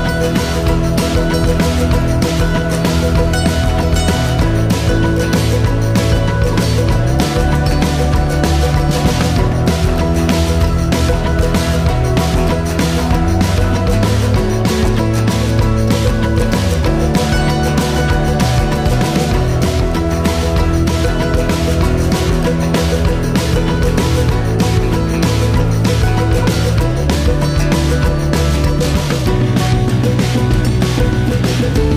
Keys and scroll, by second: 0.7-1.6 typing, 8.7 ctrl+s.